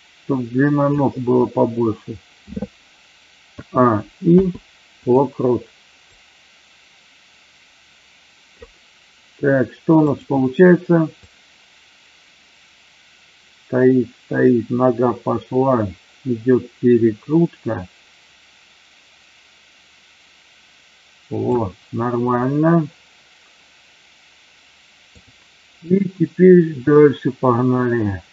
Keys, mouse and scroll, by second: 3.4 a, 4.3 i, 6.1-8.6 drag, 10.1 drag, 11.2-21.6 drag, 27.0-28.3 shift+middle drag.